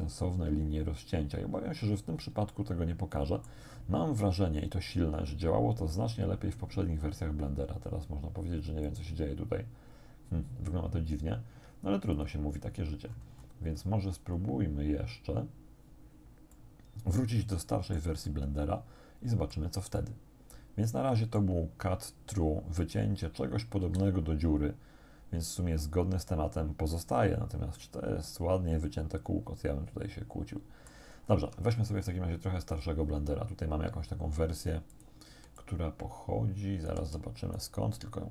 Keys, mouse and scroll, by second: 1.7 scroll down 1, 2.6-3.7 shift+drag, 8.9 click, 12.2 click, 13.1-13.6 scroll down 1, 13.6-14.0 scroll down 1, 14.2-14.6 scroll down 1, 16.6 middle click, 16.6-18.2 drag, 18.3-19.8 shift+drag, 20.0 shift+middle click, 20.6 click, 20.8 middle click, 23.8 x, 27.0 click, 27.8-31.1 drag, 31.2 scroll down 1, 31.4 Tab, 32.7 click, 35.0 click, 35.6-37.1 alt+drag, 37.6-38.3 alt+right drag.